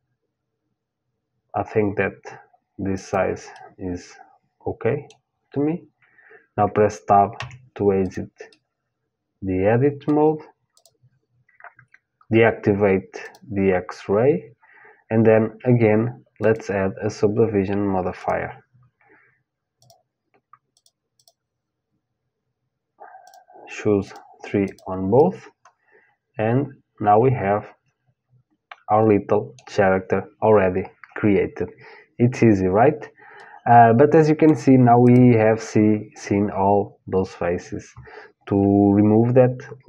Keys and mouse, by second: 3.1-5.1 middle drag, 6.9 Tab, 7.6-9.7 drag, 9.2 middle click, 10.4-15.1 drag, 16.0-18.0 drag, 19.4-26.4 drag, 25.4-26.8 middle drag, 33.0-35.0 middle drag, 34.6-36.6 drag.